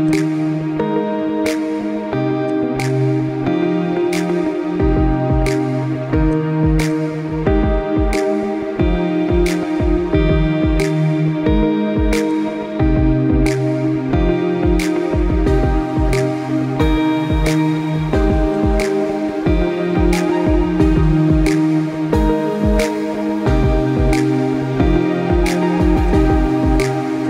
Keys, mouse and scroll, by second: 0.4 g, 1.6 middle click, 2.1 middle click, 3.2 click, 4.3 Tab, 4.8 middle click, 6.6 click, 7.2 scroll down 1, 7.7 g, 9.9 middle click, 10.4-10.7 scroll down 1, 10.7 middle click, 11.3 click, 11.8 middle click, 12.9 click, 13.7 g, 15.1 middle click, 15.6 click, 16.0 middle click, 16.4 g, 17.5 middle click, 17.9 click, 18.2 middle click, 18.8 g, 20.4 middle click, 20.9 middle click, 22.0 g, 23.8 middle click, 24.6 g, 26.3 middle click, 26.5 middle click, 26.9 click.